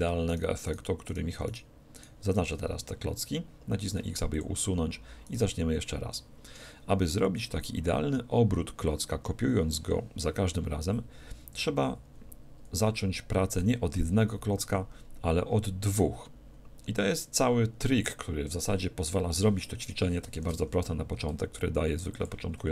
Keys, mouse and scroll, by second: 0.3-3.7 right drag, 4.0 x, 5.3-7.0 right drag, 20.4 shift+d, 22.3-22.7 drag, 22.5-22.7 middle drag.